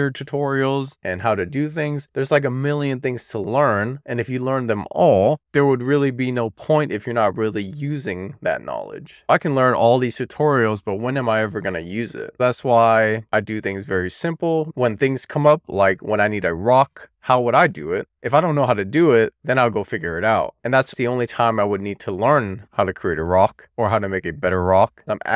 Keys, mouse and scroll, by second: 4.3 click, 22.6-24.3 scroll up 1, 24.3 e, 25.2 r.